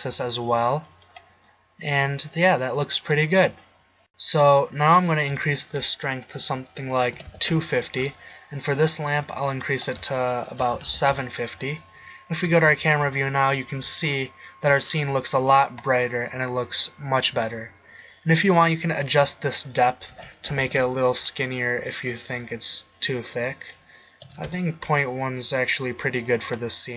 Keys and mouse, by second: 1.2-2.1 drag, 8.8 right click, 12.5 KP_0, 12.8 shift+z, 17.4-19.0 middle drag, 19.1-21.0 middle drag, 22.1 middle click.